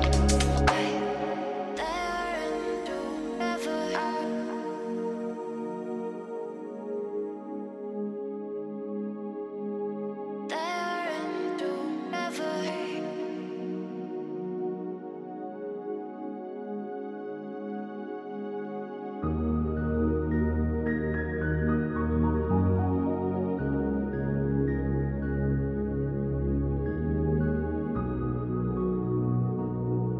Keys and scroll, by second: 8.6 ctrl+z, 19.4 ctrl+g.